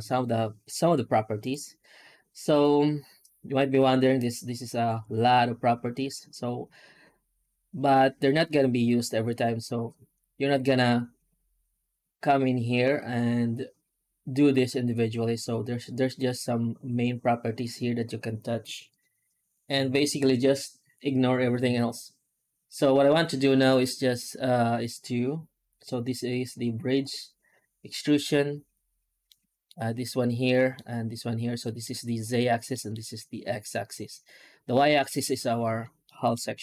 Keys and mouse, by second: 29.1 middle click, 30.4 middle drag, 31.5 middle drag, 32.6 middle drag, 36.0 middle drag.